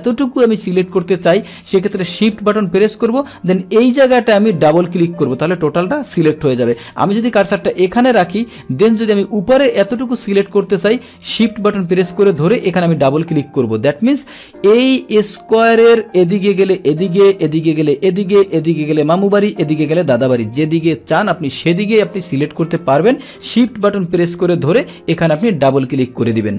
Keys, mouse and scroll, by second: 4.6 shift+click, 4.7 shift+click, 6.8 click, 12.5 shift+click, 12.7 shift+click, 13.7 click, 14.5 click.